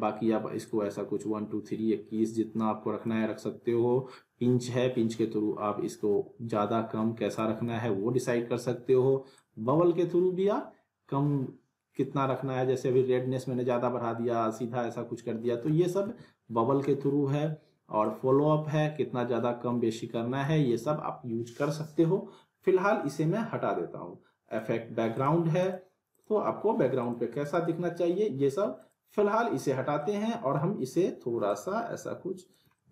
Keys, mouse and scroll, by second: 0.7-3.1 drag, 7.7 ctrl+z, 9.3-15.9 drag, 16.0 z, 18.0-20.5 drag, 20.7 ctrl+z, 23.0 right click, 24.6 click, 30.0-30.6 alt+middle drag, 31.5-32.7 drag, 32.7-32.9 alt+middle click.